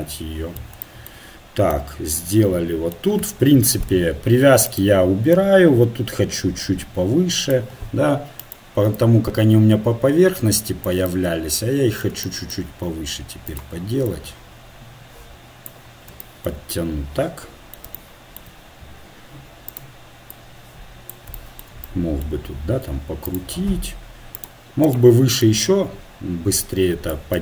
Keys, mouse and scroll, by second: 0.2-1.2 middle drag, 1.7 middle click, 2.6-4.6 middle drag, 4.6-6.4 right drag, 5.3-7.1 drag, 8.4-10.3 right drag, 9.0-10.8 drag, 11.1-13.5 middle drag, 13.5-15.6 right drag, 14.1-15.9 drag, 16.1-17.2 middle drag, 19.7-22.0 right drag, 20.3-22.0 drag, 21.5 middle click, 23.3 right click, 25.4-26.8 middle drag, 26.8 click.